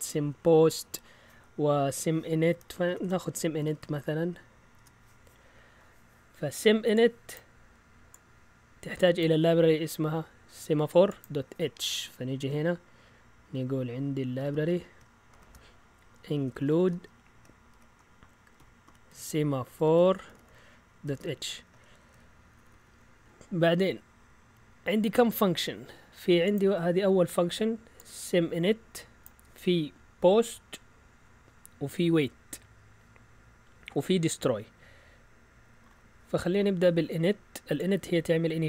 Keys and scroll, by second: 2.9-4.7 typing, 14.4-23.7 typing.